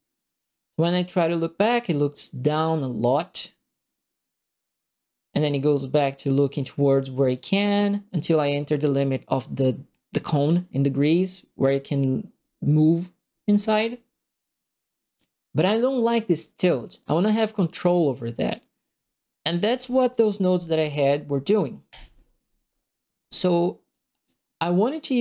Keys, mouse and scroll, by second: 1.7-2.8 drag, 3.6 right click, 4.4 right click, 4.6 click, 19.7 shift+Escape, 21.8 click, 23.8 right click.